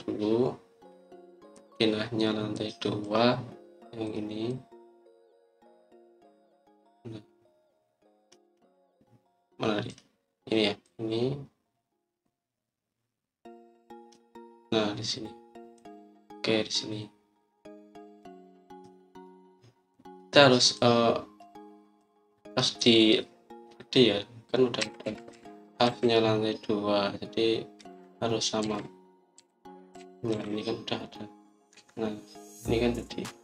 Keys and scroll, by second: 26.2 Up, 26.7 Left, 28.4-30.0 typing, 31.2 typing, 32.6 Escape.